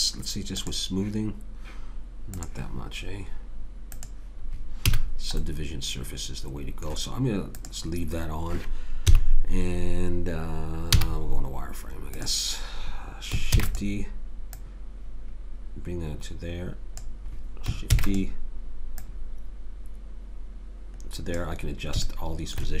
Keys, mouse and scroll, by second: 4.9 a, 5.5 click, 5.8 middle click, 7.5-9.4 drag, 9.1 KP_3, 11.0 z, 13.5 shift+d, 18.0 shift+d, 22.4 middle click.